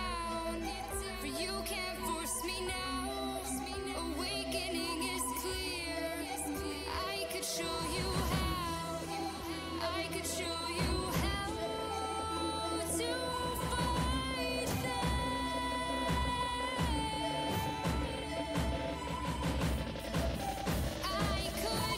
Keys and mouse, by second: 1.2 x, 3.3 x, 5.7-7.9 drag, 7.9-9.0 middle drag, 7.9 x, 10.1 KP_2, 11.6 KP_1, 16.2 g, 17.8 g, 21.7 z.